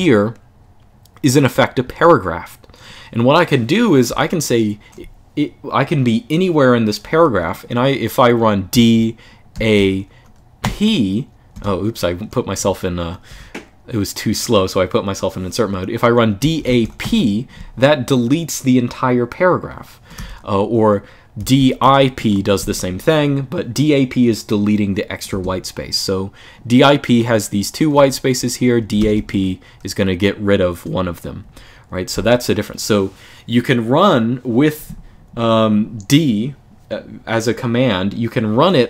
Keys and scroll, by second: 8.4 d, 8.6 d, 9.3 a, 10.3 p, 11.3 Escape, 12.3-13.0 typing, 15.9-17.2 typing, 19.9-22.4 typing, 25.1 Escape, 27.7-29.5 typing, 31.1 typing.